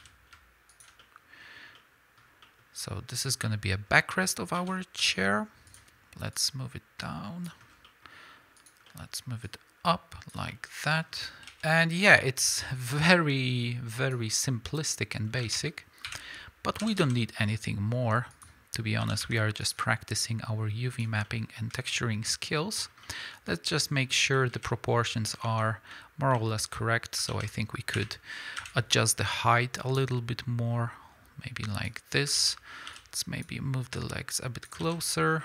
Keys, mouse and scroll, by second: 0.8 ctrl+click, 1.0-3.1 middle drag, 1.5-1.8 scroll down 2, 2.2 scroll up 2, 3.1 click, 3.5-5.7 middle drag, 4.6 s, 5.7 click, 6.3-7.8 drag, 7.7 scroll down 2, 7.8 middle click, 8.6 click, 8.9 middle click, 9.4-10.5 drag, 10.5-13.0 middle drag, 12.3 KP_1, 13.0-18.4 drag, 14.4 scroll up 1, 15.4 alt+a, 16.0 l, 16.8 e, 17.4 s, 19.0 s, 20.2-21.2 drag, 21.2-30.0 middle drag, 22.8 scroll down 2, 24.6 KP_1, 25.2 scroll up 2, 25.4 ctrl+Tab, 26.3 z, 27.3 alt+a, 28.0 1, 28.6 b, 30.0-35.3 drag, 32.4 alt+a, 32.9 b, 34.8 alt+a, 35.3-35.4 middle drag.